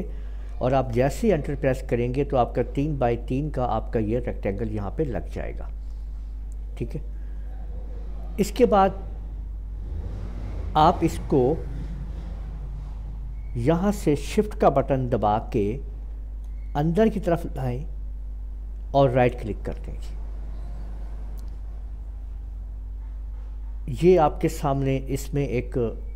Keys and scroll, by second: 0.9 Return.